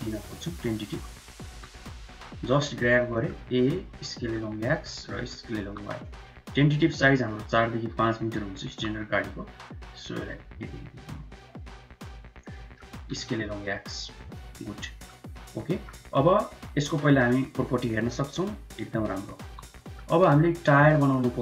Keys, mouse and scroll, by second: 0.7 3, 1.1 click, 1.4 g, 2.7 click, 3.0 middle click, 3.3 a, 3.7 s, 4.7 middle click, 5.0 s, 6.5 q, 8.1 s, 12.4 middle click, 12.8 s, 13.6 click, 14.2 middle click, 15.2 middle click, 15.9 Tab, 16.7 n, 17.8 click, 19.3 n, 19.6 middle click, 20.1 Tab, 20.4 Tab, 20.4 click, 20.4 n, 20.5 middle click, 20.8 shift+middle click, 21.3 q.